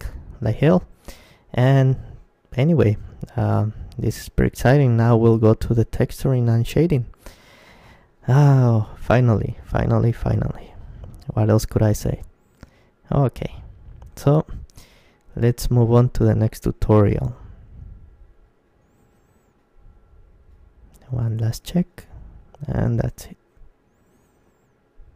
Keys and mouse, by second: 11.8 KP_Decimal, 13.3-18.1 middle drag.